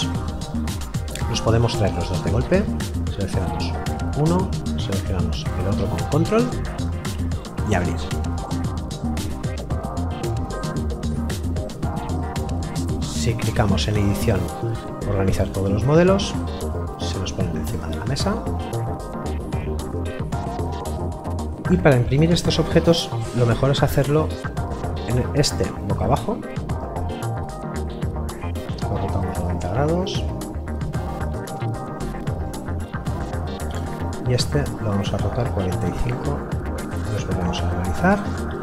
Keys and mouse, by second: 1.9 click, 5.4 ctrl+click, 12.0 click, 15.5 click, 17.8 middle click, 19.0 right click, 25.1 click, 33.5 click.